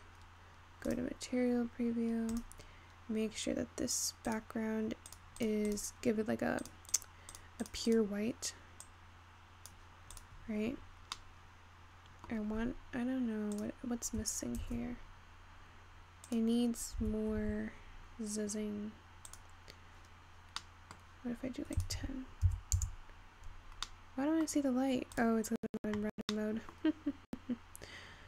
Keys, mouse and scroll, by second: 0.3-1.5 scroll up 1, 1.5 click, 2.3 scroll down 3, 2.4 click, 4.3 click, 5.5 click, 6.4-7.5 drag, 8.6 click, 10.4 drag, 11.5-14.6 middle drag, 14.6 click, 14.8 shift+d, 17.7 g, 20.6 scroll down 3, 20.9 middle click, 21.2 scroll up 1, 22.2-25.1 drag, 25.1 middle click.